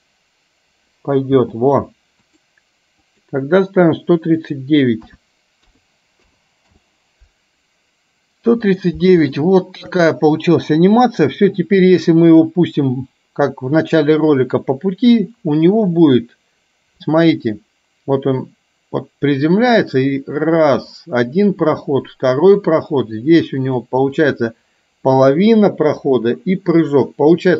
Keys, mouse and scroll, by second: 1.4 space, 2.4 click, 3.1 click, 4.6 click, 9.5-10.0 shift+middle drag, 12.2-22.7 drag, 23.7 click, 24.4-27.5 drag.